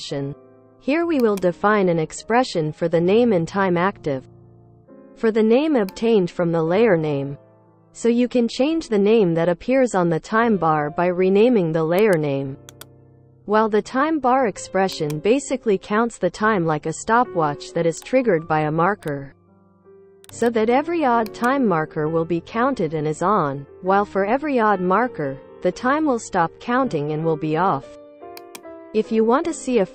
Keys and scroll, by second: 3.9-5.3 typing, 6.4 Return, 6.6-9.2 typing, 13.1 ctrl+c, 17.1 ctrl+v.